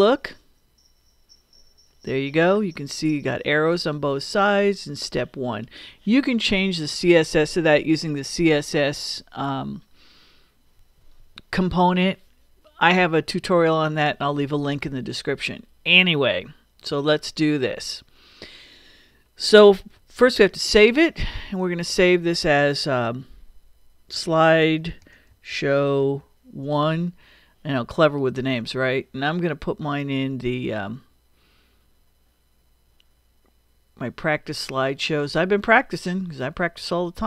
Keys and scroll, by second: 0.0 super+Return, 20.3 super+s, 23.9-26.6 typing.